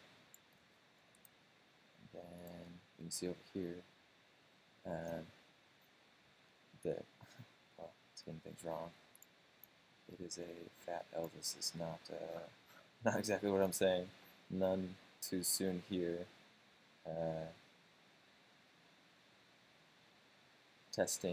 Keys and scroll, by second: 0.8 super+space.